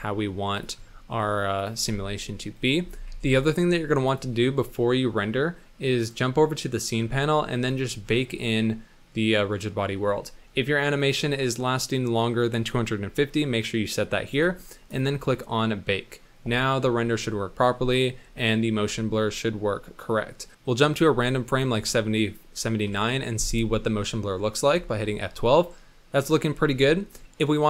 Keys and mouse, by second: 1.8 space, 2.8 space, 3.1 z, 4.7 click, 7.7 click, 11.1-14.4 drag, 14.9 click, 20.0-21.6 drag.